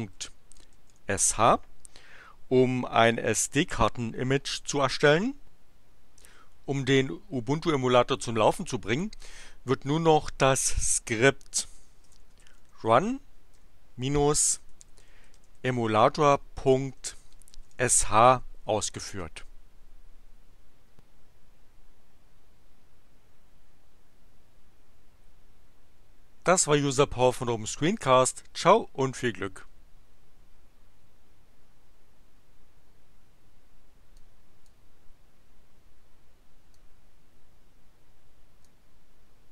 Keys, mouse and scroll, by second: 0.0-1.4 typing, 3.5 Return, 11.5-18.2 typing, 18.6 Return, 34.5 click, 36.8-38.9 drag.